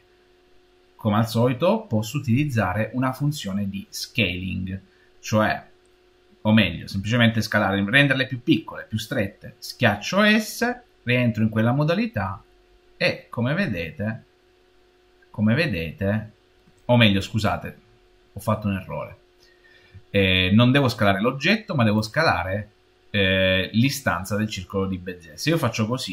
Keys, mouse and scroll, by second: 10.4 s, 11.3 middle click, 12.2 middle click, 12.4 middle click, 12.6-15.6 middle drag, 21.8 click.